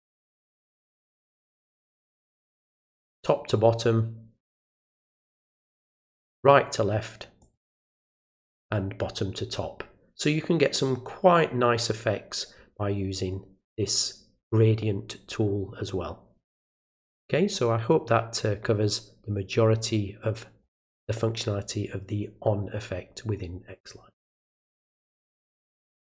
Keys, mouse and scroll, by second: 1.4 click, 4.4 click, 7.4 click, 26.0 click.